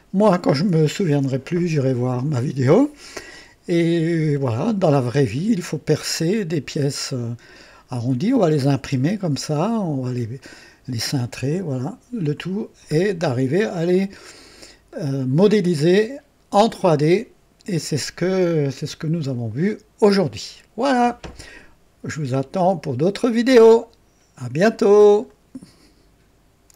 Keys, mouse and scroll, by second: 5.1 scroll up 2, 5.6 right click, 12.9 scroll down 1, 13.9-15.1 right drag, 15.2 scroll down 1, 15.7-16.7 right drag, 19.1-20.4 right drag, 25.2 right click, 26.7 click.